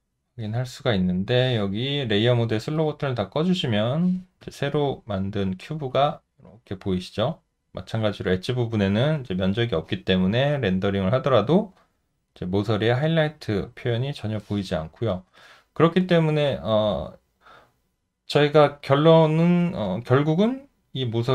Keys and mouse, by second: 0.7 alt+middle click, 4.4 alt+click, 5.4 alt+middle click, 5.9 alt+click.